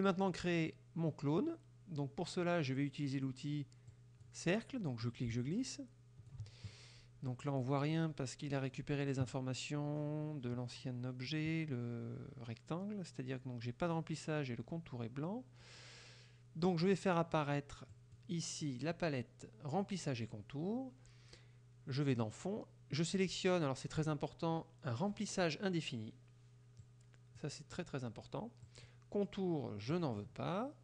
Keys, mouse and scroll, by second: 4.0 click, 5.1-6.5 ctrl+drag, 18.0 click, 26.9 click, 28.7 click, 30.0 click.